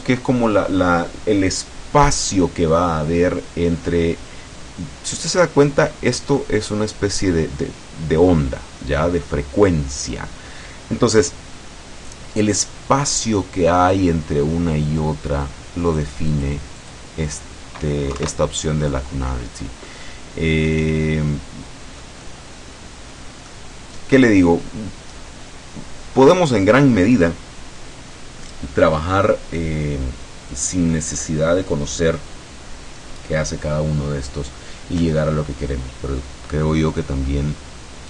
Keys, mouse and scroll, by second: 5.2 middle click, 6.5 middle click, 13.3-16.3 drag, 16.9 click, 18.1 KP_2, 19.1 scroll up 2, 19.3-19.9 scroll down 2, 19.9-23.8 drag, 23.9-24.2 scroll up 2, 24.8 scroll down 2, 26.3-26.7 scroll down 2, 31.1 scroll down 2, 31.3-31.6 scroll up 2, 31.9 scroll down 1, 36.1-36.6 scroll down 1.